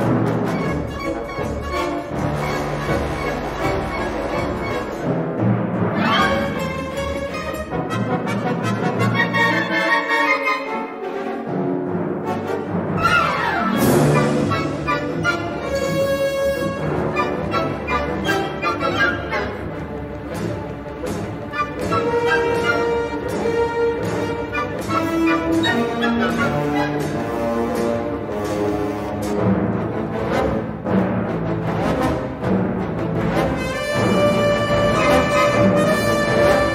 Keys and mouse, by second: 0.7 b, 2.9 b, 4.3-6.7 drag, 6.8 middle click, 7.2 click, 7.7 click, 8.2 3, 8.7 click, 9.8 click, 13.2 click, 13.7-15.7 typing, 17.0 shift+middle click, 19.2 middle click, 19.7 middle click, 20.6 2, 20.8 click, 22.1 2, 24.0 alt+shift+click, 25.4 ctrl+b, 28.5 g, 29.5 2, 30.4 alt+shift+click, 31.2 g, 32.7 middle click, 33.7 middle click, 35.1 l, 36.5 l.